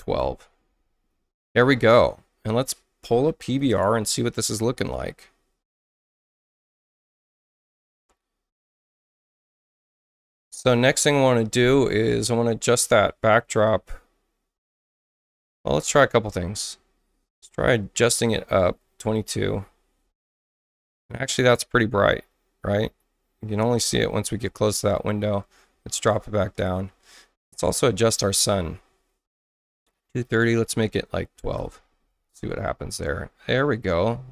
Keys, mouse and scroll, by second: 0.0-0.6 typing, 3.6 click, 6.3 click, 9.5 click, 15.4 click, 18.7 2, 19.1 click, 28.2 click, 30.2 click, 31.1-31.9 typing.